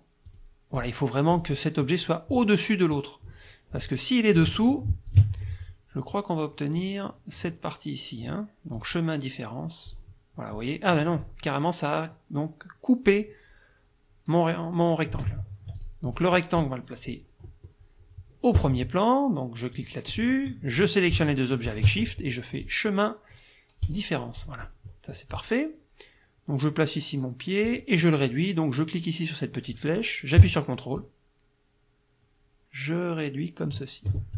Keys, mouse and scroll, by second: 0.3 click, 0.8 click, 1.3 click, 4.4 click, 5.1 shift+click, 8.8 click, 9.9 click, 15.3 ctrl+z, 15.8 ctrl+click, 17.5 middle click, 19.8 click, 21.7 shift+click, 22.6 click, 23.8 click, 24.4 click, 25.3-27.9 drag, 31.0-33.9 ctrl+drag.